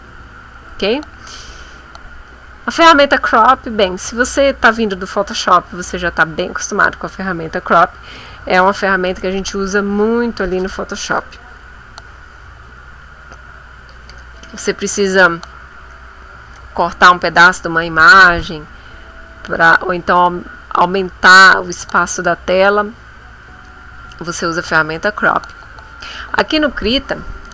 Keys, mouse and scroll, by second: 0.0 click, 0.8 c, 2.2 click.